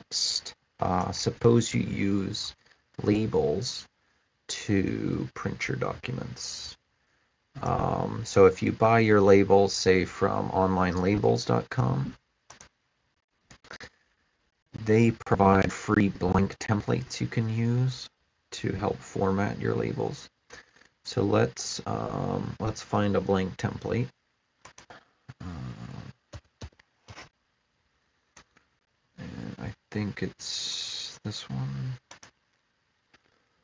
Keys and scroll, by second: 24.6-26.9 typing.